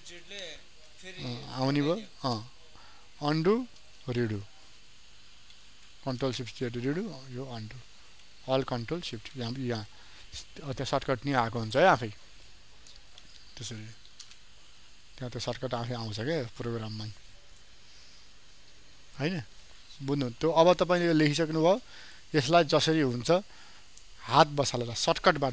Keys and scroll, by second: 2.7 ctrl+alt+z, 4.0 ctrl+shift+z, 7.0 ctrl+alt+z, 8.8 ctrl+z, 9.5 ctrl+alt+z, 13.5 ctrl+shift+z.